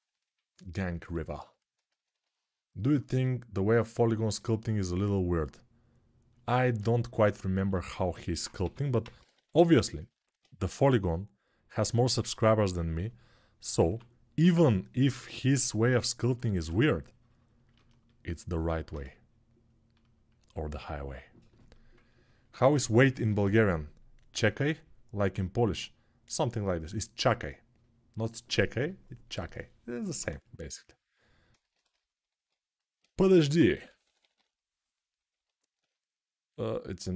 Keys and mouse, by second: 7.5 alt+q, 8.4 g, 8.7 ], 8.9 ], 9.2 ], 10.4 g, 13.6 1, 32.1 alt+q, 33.0-33.9 typing.